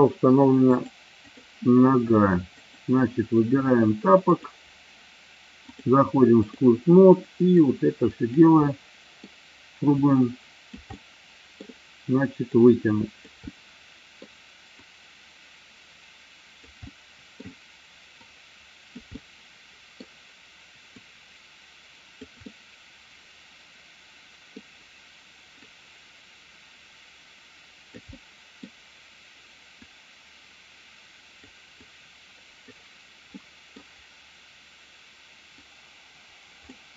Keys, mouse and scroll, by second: 0.6 click, 2.5 click, 5.6 click, 7.5 click, 8.5 middle click, 10.0 click, 10.8 middle click, 12.5 click, 13.4 middle click, 14.8-16.6 drag, 16.8 middle click, 18.1 click, 19.1 middle click, 21.0-22.3 drag, 22.4-24.5 middle drag, 25.6-28.0 drag, 28.1 middle click, 29.7-31.5 drag, 31.7 click, 33.4 middle click, 36.7-36.9 middle drag.